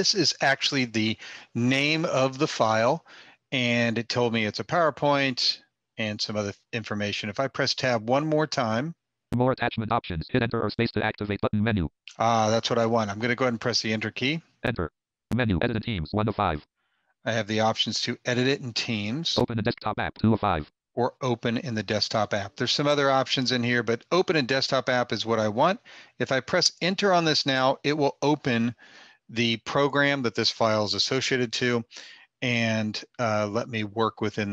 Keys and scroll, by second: 7.1 Tab, 9.3 Tab, 13.1 Return.